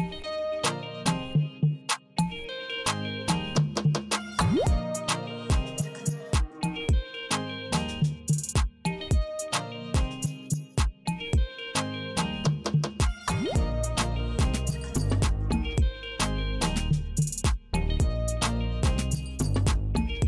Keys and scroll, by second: 0.2 Return, 2.0 Return, 4.0 F5, 6.5 shift+t, 7.9 Left, 9.1 Left, 10.2 Left, 11.2 Left, 12.2 Left, 14.2 Left, 15.0 Left, 15.8 Left, 16.7 Left, 17.8 Left, 18.6 Left, 19.2 Left.